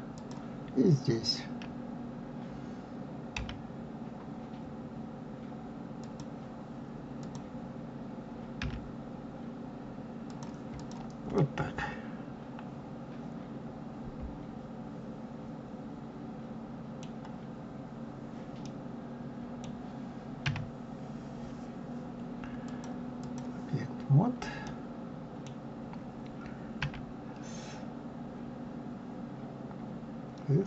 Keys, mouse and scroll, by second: 0.1 click, 3.3 g, 7.2 click, 8.6 g, 10.7 click, 11.4-14.4 middle drag, 17.6-18.0 scroll up 1, 18.0-18.6 scroll down 1, 18.6-20.4 middle drag, 20.4 s, 22.7-24.6 drag, 24.6-26.8 middle drag, 26.8 s.